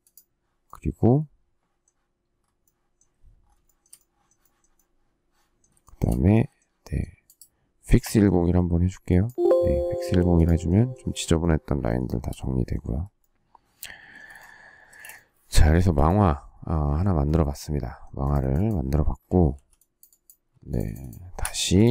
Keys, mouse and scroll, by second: 3.6 shift+middle click, 5.8 shift+middle click, 12.0 shift+middle click, 13.7 space, 14.2 Escape, 14.8 space, 14.9 Escape, 19.5 e, 20.4 space, 21.4 Escape.